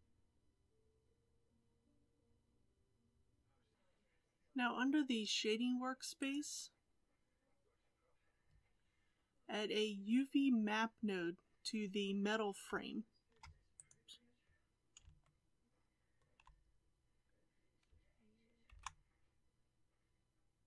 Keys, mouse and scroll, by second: 3.3 click, 6.3 click.